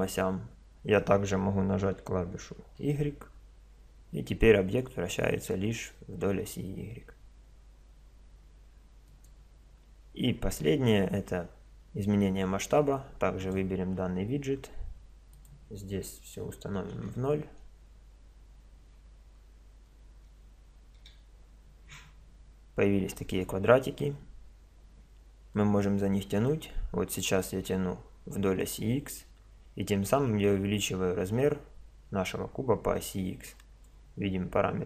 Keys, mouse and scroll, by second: 13.4-15.1 drag, 15.3-17.2 drag, 25.5-27.3 drag.